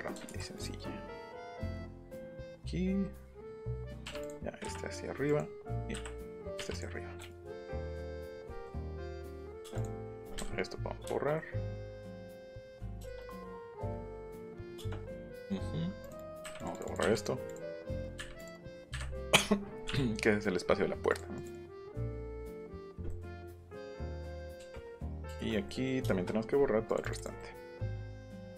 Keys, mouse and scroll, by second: 0.3 ctrl+z, 0.5 click, 1.2 click, 1.4 middle click, 1.7 middle click, 2.9 middle click, 3.5 click, 4.0 Up, 4.2-5.4 drag, 5.7 scroll up 1, 6.3 click, 6.6 Up, 6.7 click, 7.3 click, 7.3 e, 8.0 click, 8.3 scroll down 1, 8.9 p, 9.1 click, 9.8 click, 10.0 scroll up 1, 13.6 click, 14.3 middle click, 14.5 ctrl+z, 14.8 middle click, 14.8 space, 15.2 click, 16.0 click, 16.2 click, 16.3 click, 16.6 click, 17.2 click, 17.5 click, 17.7 click, 17.9 click, 18.0 click, 18.4 click, 18.7 click, 19.7 middle click, 20.4 middle click, 21.1 click, 21.5 click, 21.7 click, 22.0 middle click, 22.6 middle click, 23.1 middle click, 26.8 click, 27.0 click, 27.1 click, 27.4 middle click, 27.4 scroll, 28.3 click.